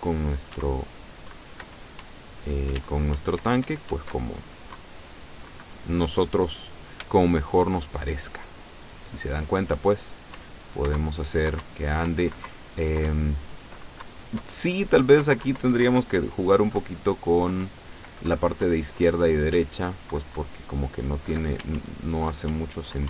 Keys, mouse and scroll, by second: 0.6 w, 0.7 Down, 2.1 Up, 2.8 w, 3.2 Up, 3.7 w, 3.9 Up, 4.8 Down, 7.1 s, 10.5 Up, 11.0 Down, 11.7 Up, 12.3 Right, 12.5 Left, 13.1 Right, 14.1 Left, 14.5 Right, 15.3 Left, 16.0 Right, 16.9 Left, 17.7 Right, 18.3 Left, 19.6 Left, 20.4 Right, 21.7 w, 21.8 Up.